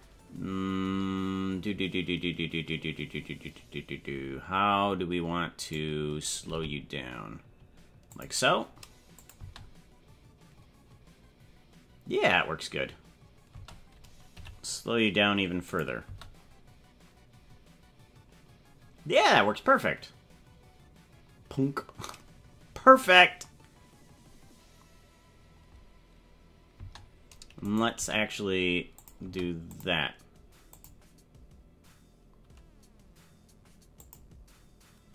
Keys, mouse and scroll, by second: 5.6 right click, 6.5 g, 9.2 click, 9.4 space, 13.6 space, 14.3 g, 16.0 space, 26.8 space, 27.6 right click, 27.9 g, 29.2 space, 29.7 click, 30.8 click, 34.0 click.